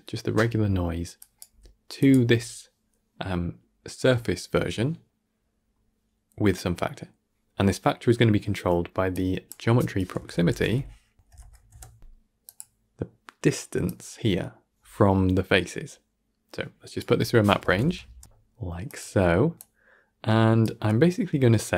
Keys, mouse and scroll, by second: 0.7 middle click, 1.1 click, 1.4 g, 7.6-9.0 middle drag, 9.0 click, 13.7 click, 19.4 click, 20.9-21.6 scroll up 7.